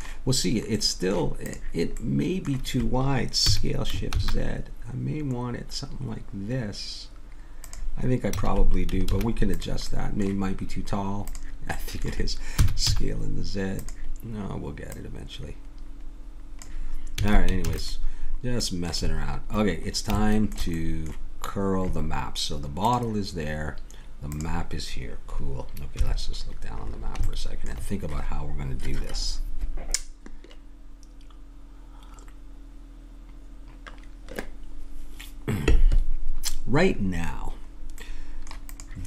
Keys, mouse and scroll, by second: 0.8 middle click, 1.4-3.4 drag, 3.4 s, 8.3 a, 9.0 ctrl+s, 11.3 click, 12.6 s, 14.9 click, 17.2 a, 17.6 ctrl+s, 22.8-25.9 drag, 25.9 KP_7, 38.7-39.0 drag.